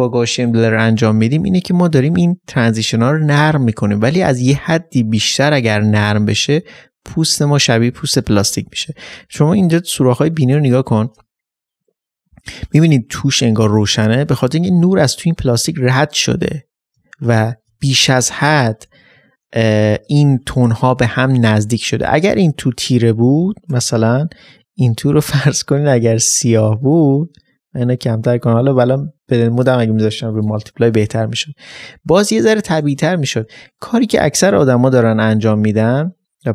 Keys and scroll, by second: 34.9 Delete, 35.6 ctrl+space.